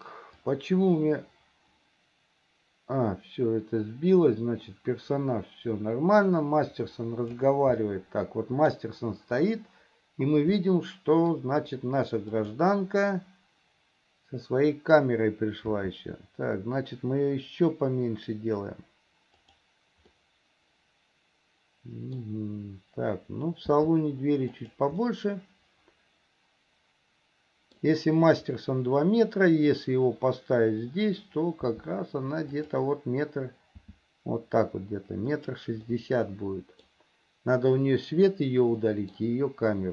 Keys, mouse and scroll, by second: 0.8-7.8 drag, 8.0-9.1 middle drag, 10.9 middle click, 11.3 click, 15.9 s, 20.4-22.5 middle drag, 23.9 s, 25.3-28.1 middle drag, 31.9 s, 33.9 s, 36.1-37.3 middle drag, 39.1 scroll up 1, 39.1 middle click.